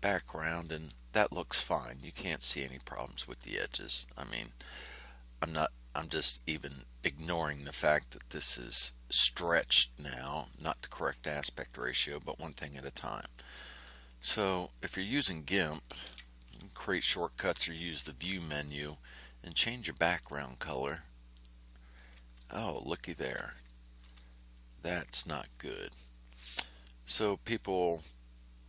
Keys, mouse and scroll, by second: 14.6 ctrl+scroll up 2, 15.2 ctrl+scroll down 2, 15.8 ctrl+click, 17.9 5, 20.1 click, 21.3 click, 22.7-23.2 ctrl+scroll up 4, 23.6 ctrl+middle click, 24.1 ctrl+click, 24.5-24.9 ctrl+scroll up 1, 25.4-26.3 ctrl+scroll down 5.